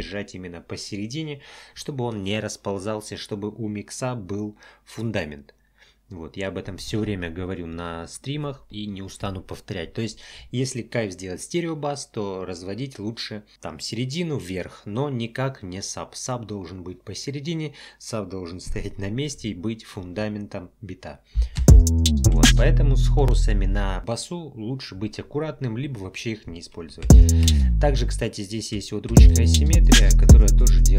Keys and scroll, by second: 21.6 space, 27.0 space, 29.1 space.